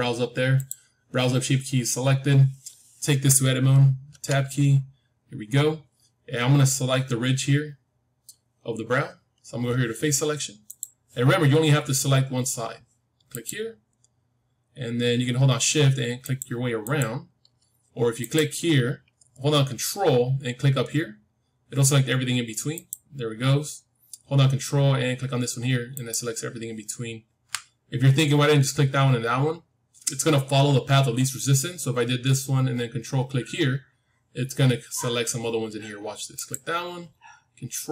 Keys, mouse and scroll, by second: 4.0 Tab, 10.6-12.6 drag, 13.2-15.4 drag, 16.1-20.3 drag, 22.7-24.6 drag, 25.8-27.9 drag, 36.2-37.9 drag.